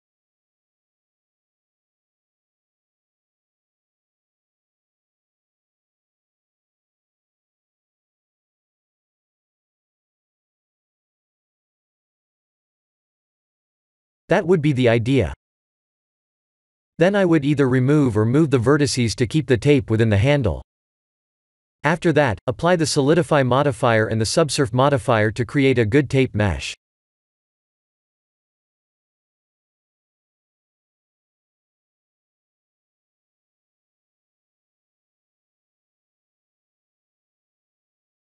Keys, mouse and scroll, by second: 0.6 click, 2.8 click, 7.0 middle click, 7.8 KP_1, 10.5-10.9 scroll down 3, 11.1 shift+middle click, 14.3 click, 14.8 click, 16.0 shift+middle click, 17.8 click, 18.3 click, 20.2 scroll down 2, 21.0 scroll down 1, 21.0 g, 26.1 click, 26.8 scroll down 7, 26.8 KP_3, 26.8 KP_7, 26.8 KP_1, 28.3 KP_3, 28.9 r, 34.0 middle click, 35.8 click, 36.8 shift+middle click, 37.8 click.